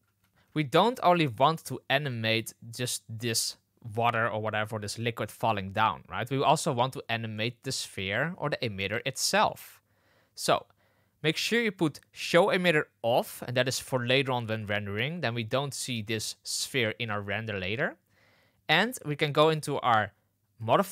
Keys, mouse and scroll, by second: 0.0 space, 1.0 space, 12.3 click, 20.6 click.